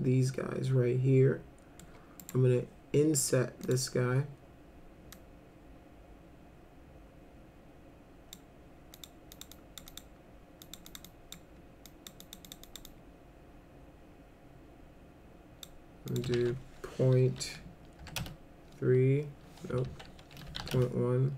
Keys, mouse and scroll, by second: 2.2 right click, 3.6 click, 5.1-8.3 drag, 8.9 click, 9.3 click, 9.5 click, 9.9 click, 10.6 click, 10.9 click, 11.0 click, 11.9 click, 12.2 click, 12.5 click, 12.6 click, 12.9-15.6 drag, 16.1 click, 16.3 ctrl+a, 17.3 ., 18.0 3, 18.2 Return, 19.9 ctrl+a, 20.2-21.1 typing.